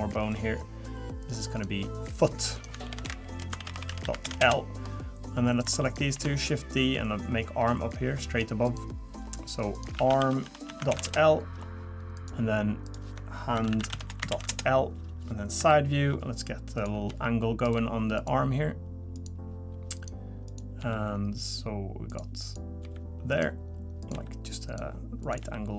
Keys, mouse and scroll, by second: 0.3 click, 1.5 click, 2.1 click, 2.6 click, 3.8 o, 5.5 click, 5.8 shift+click, 6.1 shift+d, 7.0 click, 8.6 click, 9.7 click, 12.1 click, 12.8 click, 15.6 KP_3, 16.8 click, 17.1 g, 18.1 click, 19.1 click, 19.9 click, 20.5 click, 20.8 g, 22.4 click, 22.8 g, 24.0 click, 24.1 g, 25.2 click, 25.4 g.